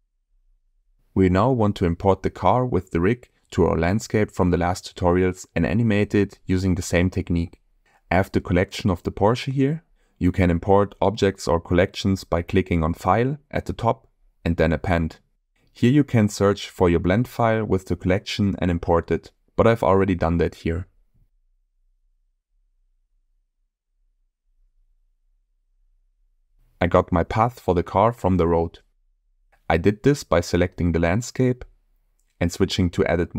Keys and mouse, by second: 7.5 click, 13.1-14.4 drag, 24.2-25.0 middle drag, 25.2-26.8 shift+middle drag, 30.4 click, 31.0 shift+middle click.